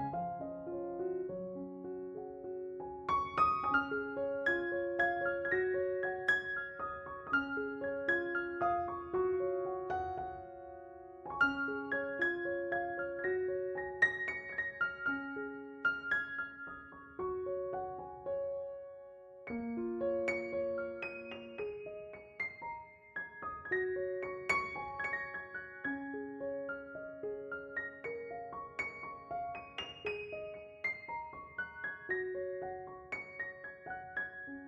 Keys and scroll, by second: 10.8 s, 13.1 s, 19.5 ctrl+z, 20.0 s.